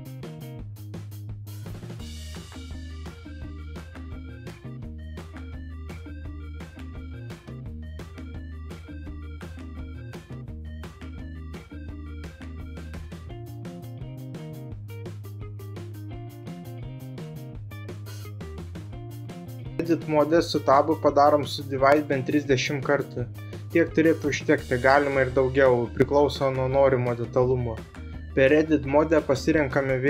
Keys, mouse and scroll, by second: 2.6 r, 3.2 z, 5.1 Return, 6.6 g, 8.4 d, 9.3 s, 11.6 g, 13.5 d, 15.1 s, 16.5 f, 18.0 g, 20.6 click, 21.5 Tab, 22.4 space, 28.1-29.3 drag.